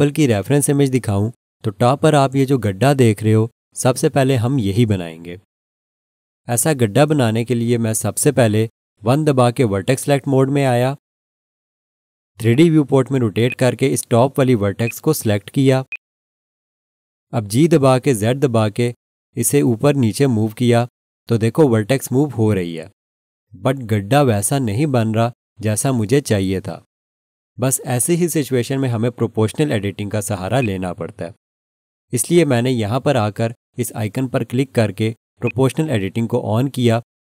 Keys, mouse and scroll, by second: 9.8 1, 13.5 alt+click, 14.8 alt+click, 15.9 click, 18.5 g, 18.9 z, 30.6 right click, 35.4 click.